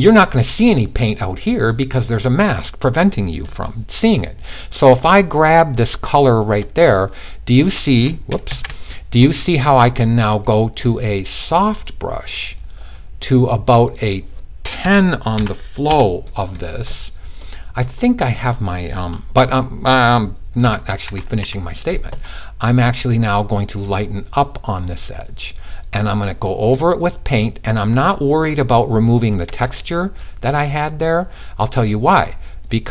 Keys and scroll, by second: 8.0 super+z, 14.3-14.9 typing, 20.1-20.9 typing.